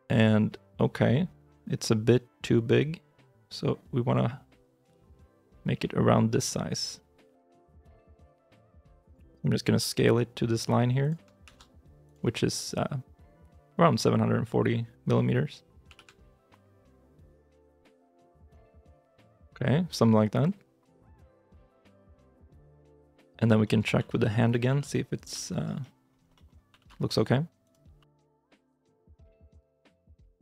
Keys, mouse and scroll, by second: 21.1 shift+middle click, 22.0 g, 23.0 shift+middle click, 23.3 scroll down 1, 23.5 scroll, 23.8 r, 24.5 g, 25.2-25.7 shift+scroll, 25.3 shift+middle click, 25.7 middle click, 26.1 scroll up 1, 26.2 middle click, 26.5 r, 26.6 y, 27.7 r, 28.4 g, 29.2 middle click, 29.9 scroll up 1, 30.1 r.